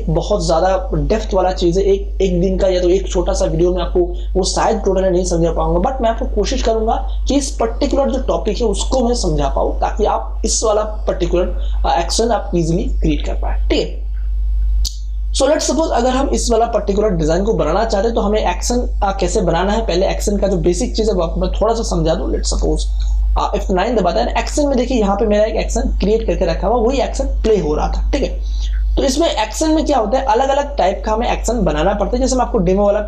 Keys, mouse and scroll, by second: 23.0 alt+F9, 28.1 click, 29.6 scroll down 1, 32.7-33.0 drag.